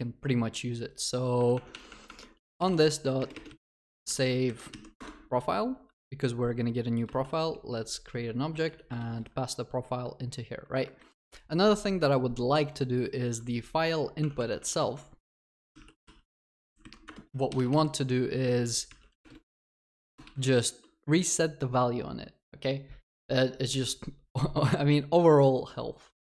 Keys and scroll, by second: 1.3 Tab, 4.9 Tab, 5.0 Return, 14.3 Tab, 17.0 Return.